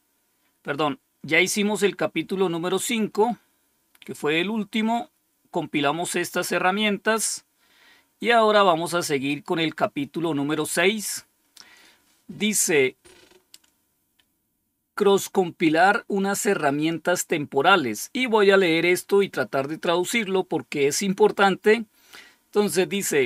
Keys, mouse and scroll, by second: 7.2-8.2 scroll down 1, 9.6 click.